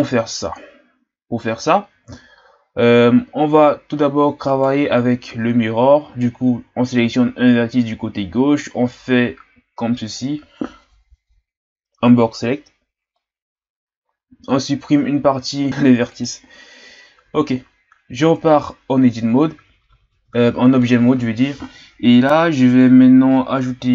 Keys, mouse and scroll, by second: 4.5 right click, 5.3 z, 8.1 b, 14.3 x, 18.2 Tab.